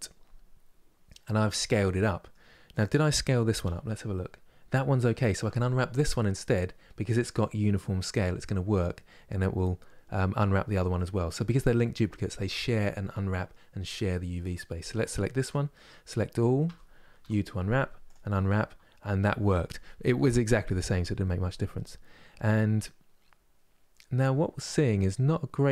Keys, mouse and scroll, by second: 2.4 click, 3.3 n, 8.5-15.0 middle drag, 15.0 Tab, 16.3 a, 17.8 u, 23.8-25.7 middle drag.